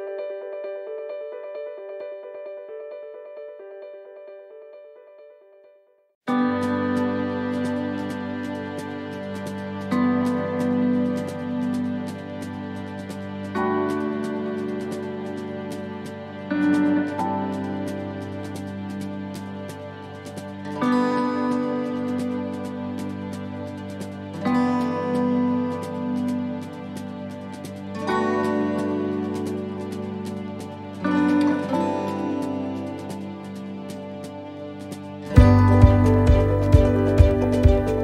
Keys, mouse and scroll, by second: 0.2 shift+middle click, 1.9 click, 3.3-3.8 scroll down 3, 3.8 shift+middle click, 4.3-4.9 scroll down 1, 4.9 scroll down 1, 10.3 right click, 10.3 p, 11.3 l, 11.8 l, 12.6 p, 14.6 right click, 15.5 l, 16.1 l, 16.8 p, 18.6 click, 19.9 right click, 20.9 shift+right click, 23.5 right click, 24.4 shift+right click, 24.7 shift+right click, 27.4 click, 30.5 right click, 31.5 shift+right click, 32.3 right click, 33.2 right click, 33.3 shift+right click, 33.9 shift+right click, 35.4 click, 37.5 right click.